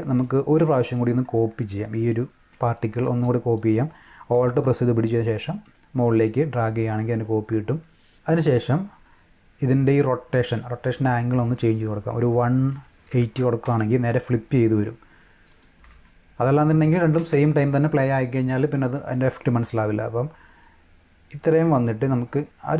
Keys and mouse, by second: 0.6 click, 3.0 alt+click, 5.2-6.3 alt+drag, 7.8 click, 8.4 click, 11.6 click, 12.4-13.9 typing, 15.5 click, 15.9 space, 17.1 space, 21.4-22.7 drag.